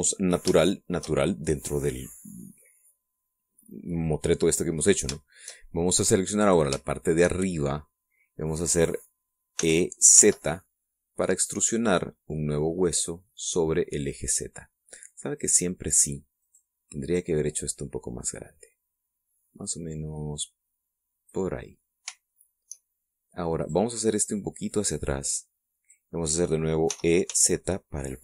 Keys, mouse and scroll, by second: 1.3 shift+middle click, 3.0-3.3 scroll down 2, 3.8-4.1 scroll down 2, 4.5 scroll up 2, 5.0-5.6 scroll down 4, 5.8 shift+middle click, 7.1 right click, 7.6-9.4 shift+middle drag, 10.2 e, 10.8 z, 16.0 click, 17.1 right click, 17.7-22.2 drag, 22.2 middle click, 24.3 right click, 25.0-26.8 drag, 27.6 e, 28.0 z.